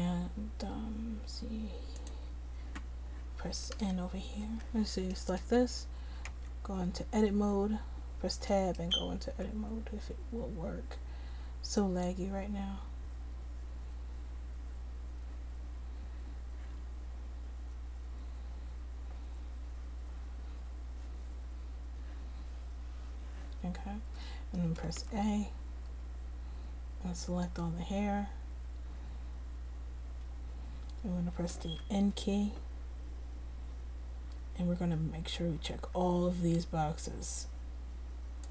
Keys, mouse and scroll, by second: 1.4-2.7 drag, 3.9 n, 4.6 n, 6.0-15.8 drag, 23.0 Tab, 24.7 middle click, 33.8 n, 35.3-38.5 drag.